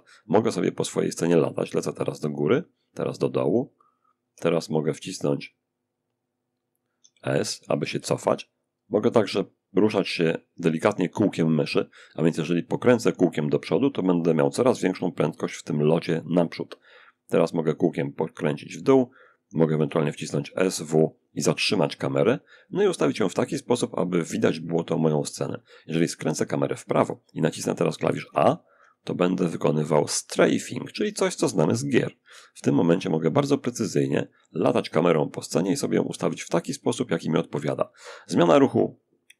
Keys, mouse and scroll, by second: 3.5 s, 4.2-4.9 scroll up 2, 6.2 s, 6.5 s, 6.7 s, 7.8 middle click, 10.4-11.5 middle drag, 12.1-13.8 middle drag, 16.5-17.2 scroll down 1, 17.2 middle click, 17.8-19.0 scroll up 1, 19.0 s, 19.4 w, 27.5 a, 28.0 a, 28.5 a, 31.8 a, 35.4 d, 37.5 a.